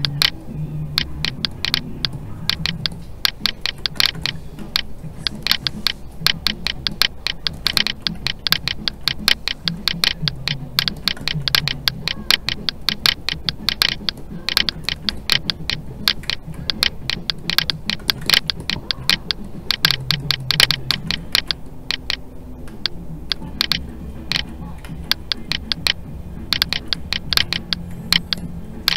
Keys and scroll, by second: 4.6 alt+a, 21.3 alt+a, 24.8 alt+a.